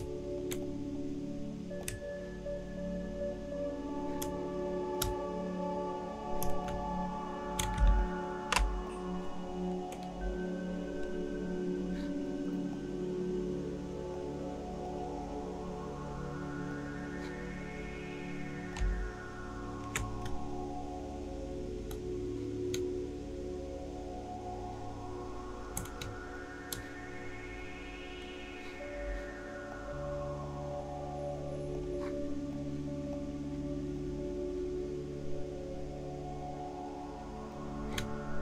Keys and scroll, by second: 7.8 shift+space.